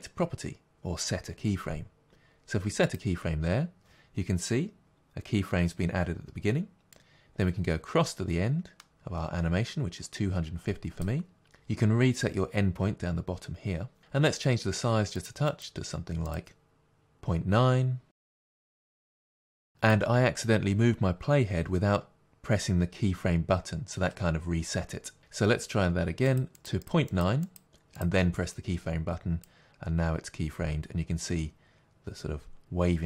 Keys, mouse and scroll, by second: 6.9-28.0 drag, 29.4-33.0 drag.